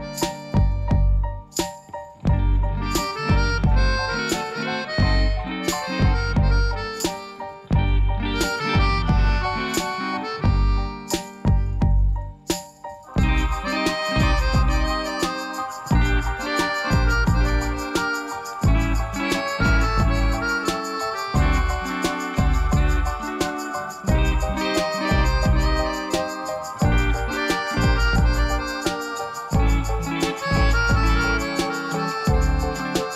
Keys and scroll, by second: 0.3 alt+a, 9.2 shift+d, 9.4 x, 11.0 alt+r, 14.7 r, 14.9 x, 15.1 9, 15.2 Return, 24.3 ., 30.5 4, 30.7 Return.